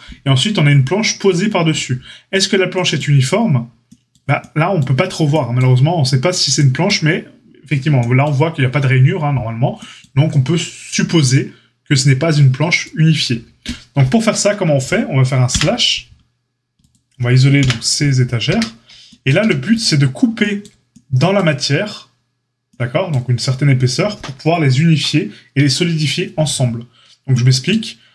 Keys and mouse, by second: 16.8 click, 16.9-28.1 middle drag, 17.6 KP_Divide, 18.4 Tab, 19.3 a.